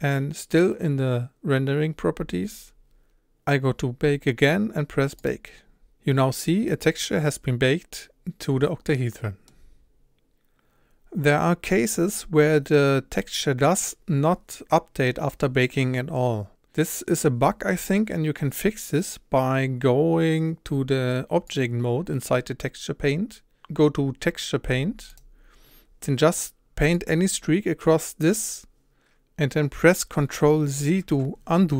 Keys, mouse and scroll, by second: 6.7-13.7 middle drag, 10.3-13.7 scroll up 1, 25.2-29.5 drag, 28.8 ctrl+shift+z, 30.9 ctrl+z.